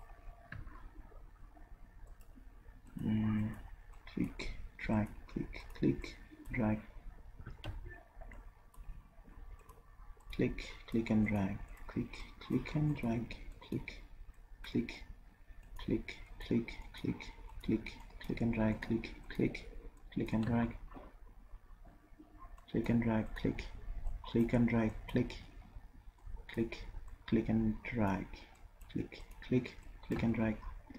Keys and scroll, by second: 7.7 ctrl+z.